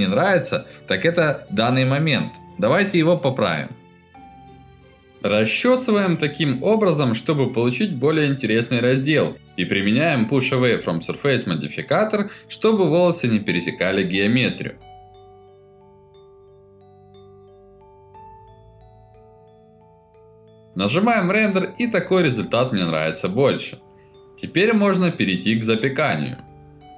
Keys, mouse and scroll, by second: 0.6 middle click, 1.4 middle click, 1.8 middle click, 2.9 scroll up 1, 4.8 alt+middle click, 5.7 click, 5.9 alt+middle click, 6.1 alt+middle click, 6.5 click, 6.9 click, 7.1 alt+middle click, 7.3 click, 7.6 alt+middle click, 8.0 click, 8.2 alt+middle click, 8.3 click, 8.8 alt+middle click, 8.9 alt+middle click, 9.1 click, 9.6 alt+middle click, 9.9 click, 10.1 alt+middle click, 10.3 alt+middle click, 10.8 ctrl+alt+middle click, 11.1 alt+middle click, 11.2 middle click, 11.3 click, 12.1 alt+middle click, 12.8 click, 13.0 click, 13.6 click, 13.9 alt+middle click, 14.5 click, 14.6 click, 14.8 alt+middle click, 15.4 click, 16.0 click, 16.2 click, 16.3 click, 16.8 ctrl+alt+middle click, 17.8 alt+middle click, 18.1 alt+middle click, 18.5 middle click, 18.6 ctrl+alt+middle click, 19.1 ctrl+alt+middle click, 19.5 middle click, 19.8 F9, 21.2 middle click, 21.2 scroll up 1, 21.7 click, 21.8 middle click, 21.8 scroll up 1, 22.6 click, 22.8 scroll up 1, 22.8 middle click, 23.1 scroll down 1, 24.1 click, 24.2-24.5 scroll up 3, 24.6 middle click, 24.8-25.6 scroll down 4, 25.3 middle click, 26.0 middle click.